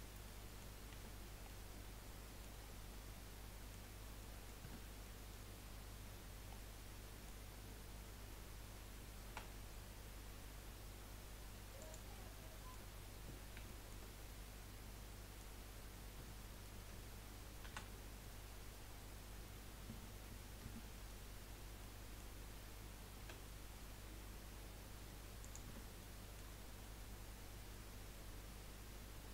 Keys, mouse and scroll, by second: 0.2 middle click, 0.9 Tab, 1.4-3.9 middle drag, 3.9-4.2 scroll up 1, 4.2-4.8 middle drag, 4.8 Tab, 5.0 scroll up 1, 5.1-6.2 middle drag, 6.2 scroll up 2, 6.5-9.8 middle drag, 9.8 e, 12.3 middle click, 13.2-13.7 scroll up 1, 13.7-15.7 shift+middle drag, 15.7-17.6 scroll up 1, 17.6 ctrl+r, 21.5-21.9 scroll up 1, 21.9-23.2 middle drag, 23.2 s, 25.6 Tab, 26.0-26.6 middle drag, 26.6 scroll down 3, 26.8-28.3 middle drag, 28.3-29.3 drag.